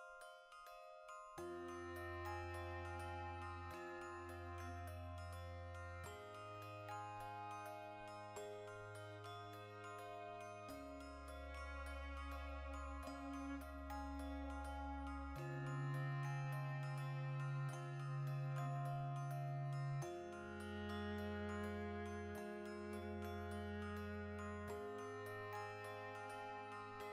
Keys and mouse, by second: 0.4 \, 2.1 right click, 2.2-9.0 middle drag, 2.9 Tab, 3.7 a, 9.0 right click, 9.2-11.3 shift+middle drag, 11.3 right click, 11.4-13.2 shift+middle drag, 12.5 Tab, 13.2 alt+right click, 13.7 3, 14.1 alt+shift+right click, 14.9 l, 15.6 ctrl+KP_Add, 16.1 ctrl+KP_Subtract, 17.0 g, 19.1 click, 19.4 Tab, 19.6 right click, 20.1 g, 20.9 click, 21.3 right click, 21.6 Tab, 22.1-25.5 middle drag, 24.9 g, 25.5 click, 25.6-27.1 middle drag.